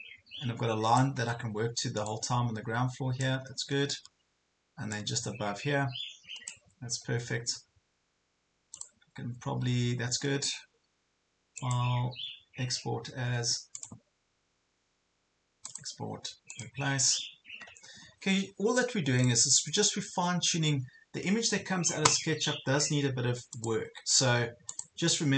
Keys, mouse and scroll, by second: 1.2 ctrl+scroll up 1, 2.1 click, 3.5 ctrl+scroll down 1, 5.0-6.7 drag, 6.9-7.3 ctrl+scroll down 1, 7.5-8.7 ctrl+scroll up 1, 8.9-25.3 drag.